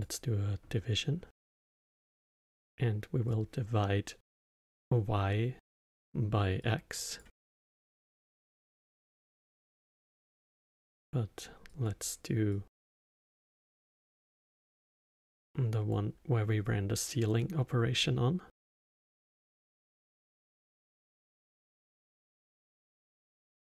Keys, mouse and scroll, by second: 0.0 click, 1.5 click, 3.3-3.6 drag, 6.6 drag, 8.8 click, 11.7 click, 12.5 click, 14.9 click, 16.6 click, 18.5 click, 19.3 shift+d, 22.4 drag.